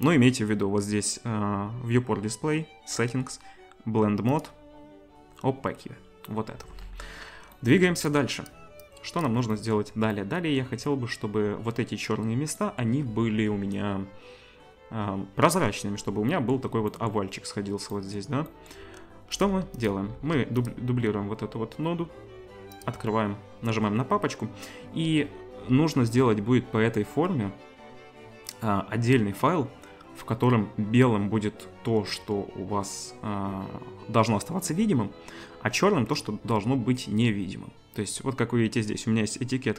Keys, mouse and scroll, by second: 19.4 click, 19.9-22.9 shift+drag, 20.2 shift+d, 22.9 right click.